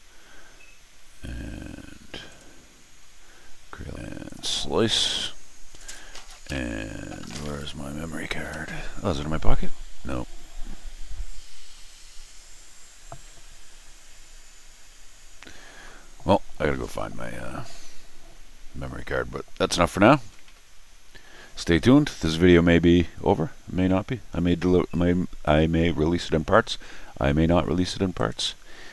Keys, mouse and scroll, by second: 2.2 click, 28.1 click.